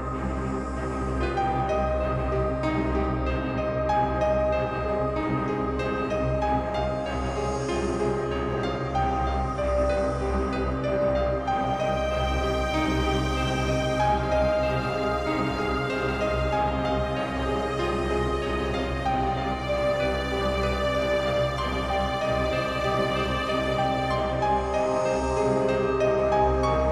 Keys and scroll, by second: 8.8 ctrl+space, 14.2 ctrl+b, 25.0 ctrl+m, 26.8 ctrl+m.